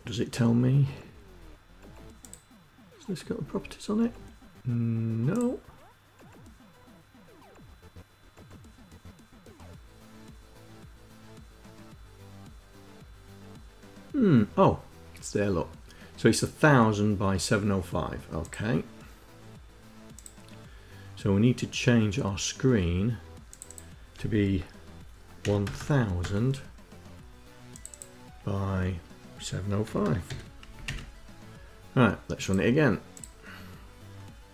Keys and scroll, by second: 24.9 KP_1, 25.2 KP_0, 25.3 KP_0, 25.7 KP_0, 29.4 KP_7, 29.6 KP_0, 29.8 KP_5, 30.3 Down, 30.4 Up.